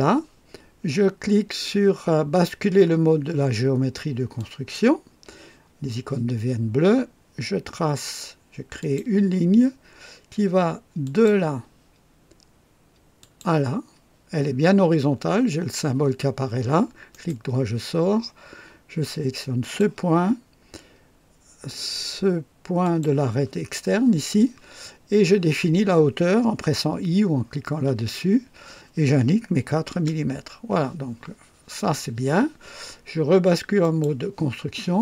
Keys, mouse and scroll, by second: 4.4 click, 8.8 click, 11.0 click, 13.1 click, 17.1 right click, 19.6 click, 22.8 click, 27.8 i, 29.5 KP_4, 29.9 KP_Enter, 33.8 click.